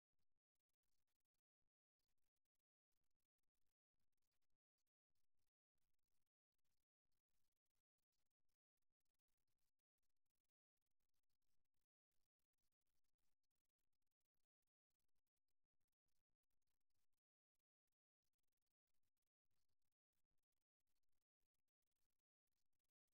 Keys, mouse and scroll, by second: 0.1-1.1 drag, 5.9-7.1 middle drag, 7.9-10.3 middle drag, 11.9 KP_1, 13.0-15.1 middle drag, 21.1 middle click, 21.8 middle click.